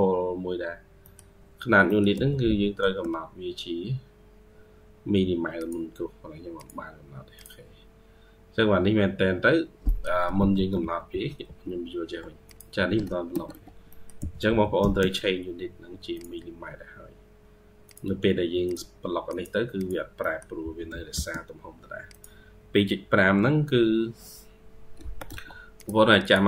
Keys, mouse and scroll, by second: 0.1-0.9 scroll down 4, 0.9 middle click, 1.4-1.7 scroll up 4, 1.7 middle click, 2.0 typing, 7.8-9.2 scroll up 5, 7.9-9.7 typing, 9.4-9.7 scroll down 2, 9.7 middle click, 10.2 ctrl+z, 10.6 ctrl+z, 10.9 ctrl+z, 11.3 ctrl+z, 13.2 Escape, 13.4 Escape, 13.7 middle click, 14.0 typing, 19.6 double click, 20.1 middle click, 20.5 typing, 24.8 Escape, 25.1 Escape, 26.1 double click.